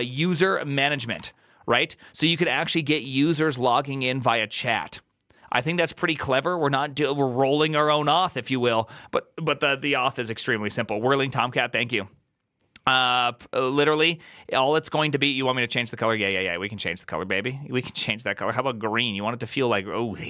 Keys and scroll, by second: 0.0-1.5 typing.